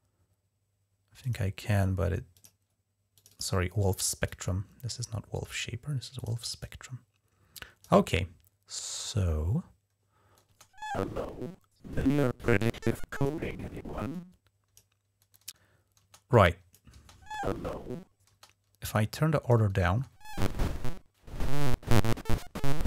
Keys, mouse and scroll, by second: 1.0 click, 2.1 click, 3.0 click, 4.1-5.3 drag, 6.0 click, 6.4-7.7 drag, 10.3 space, 12.4 click, 13.9 click, 15.8 space, 16.1 click, 16.8 space, 18.1 space, 18.8-19.6 drag, 19.7 space.